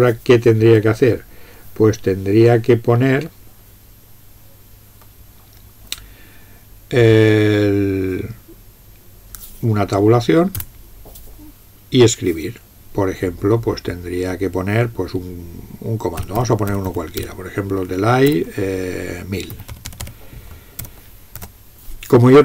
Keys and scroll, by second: 10.6 Tab, 16.2-17.3 typing, 18.3 typing, 19.5-21.4 typing.